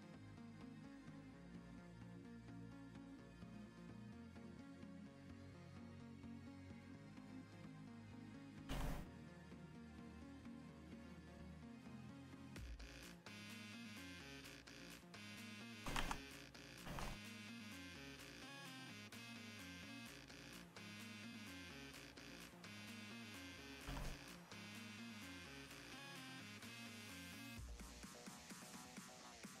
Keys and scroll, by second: 8.6 s, 9.1 s, 15.9 ctrl+z, 16.2 ctrl+z, 20.3 s, 21.4 s, 22.5 s, 23.7 s.